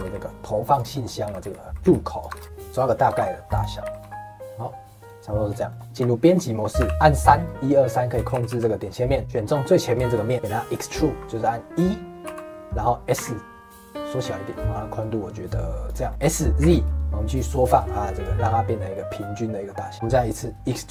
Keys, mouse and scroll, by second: 0.9 middle click, 1.2 s, 2.5 middle click, 3.0 g, 3.7 middle click, 3.8 s, 5.2 middle click, 5.5 scroll up 1, 5.6 middle click, 6.0 Tab, 6.7 3, 9.2 click, 9.5 middle click, 10.3-10.7 scroll up 1, 10.7-12.2 middle drag, 12.2 e, 16.0 shift+middle click, 16.2 s, 19.9-20.9 middle drag.